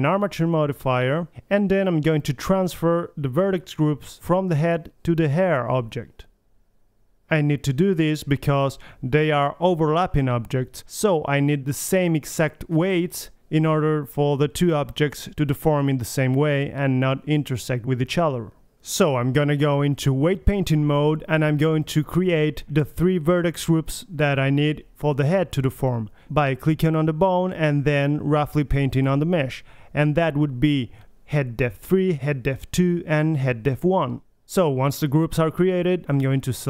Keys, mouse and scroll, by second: 0.0 click, 0.0 right click, 0.0-2.1 typing, 0.1 alt+g, 0.2 alt+r, 0.6-1.1 drag, 0.9 right click, 1.1 middle click, 1.8 middle click, 2.4 click, 2.6 right click, 2.7-7.2 drag, 7.4-8.9 middle drag, 8.9 right click, 10.0-11.9 drag, 12.2-13.6 right drag, 15.9 click, 17.6-18.1 drag, 18.9-19.4 drag, 19.6-21.4 right drag, 22.0-23.6 drag, 25.6-27.1 right drag, 27.1 middle click, 27.6-28.8 drag, 28.8 middle click, 29.0-30.3 right drag, 30.3 middle click, 30.9 click, 35.0-36.6 right drag.